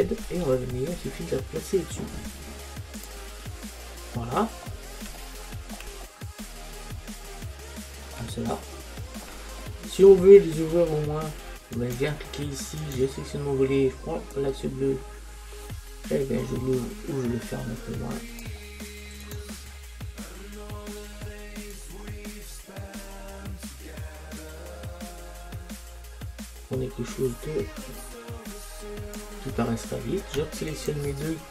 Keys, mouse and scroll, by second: 3.1 click, 3.6-11.8 middle drag, 11.8-16.1 right drag, 14.4 click, 19.3-21.8 right drag, 21.8 click, 29.9 middle click, 30.8-31.5 drag.